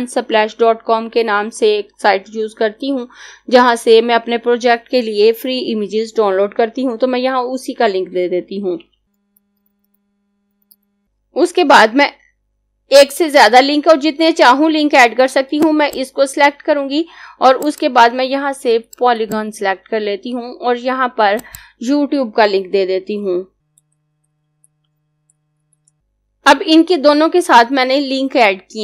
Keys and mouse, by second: 8.4-11.5 typing, 15.5 click, 23.0-26.2 typing.